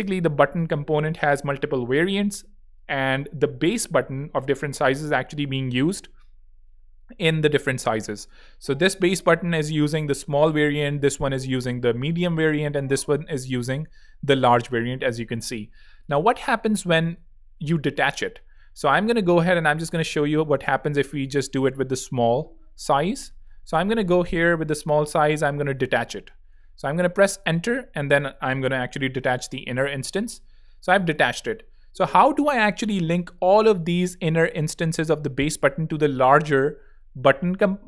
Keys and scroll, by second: 9.4 alt+z, 10.1 alt+space, 11.1 space, 14.2 z, 15.8 alt+z, 16.3 alt+space, 16.9 space, 19.8 alt+l, 20.6 alt+Return, 24.1 shift+z, 24.7 z, 25.6 alt+super+b, 26.5 alt+super+Return, 27.5 alt+Return, 30.1 alt+super+b, 33.3 alt+l.